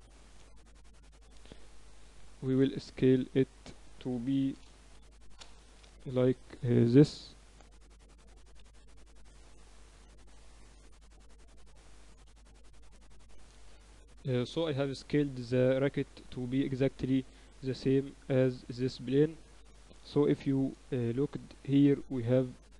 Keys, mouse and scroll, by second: 0.3 ctrl+z, 1.3 g, 3.5 right click, 3.7 s, 5.3-6.8 middle drag, 8.6 s, 9.4 KP_Decimal, 10.7-11.9 middle drag, 11.9-13.4 drag, 13.4 n, 16.0 middle click, 19.6-22.6 right drag, 21.7 ctrl+a, 22.6 n.